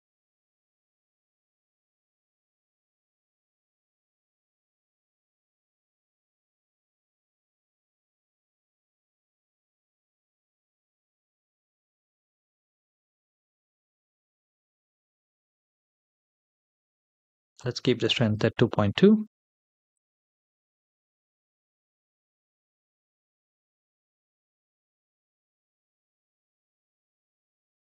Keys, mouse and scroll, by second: 17.4 click, 19.8 click, 21.3 space.